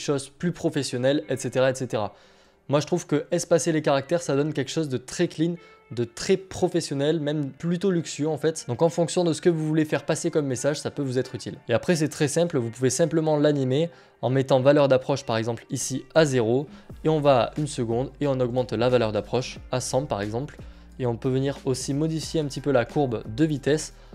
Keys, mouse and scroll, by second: 4.8-7.7 drag, 9.0 click, 13.9 click, 19.0 click, 19.1 click, 21.7 F9, 22.2 F9, 22.2 click, 22.3 click.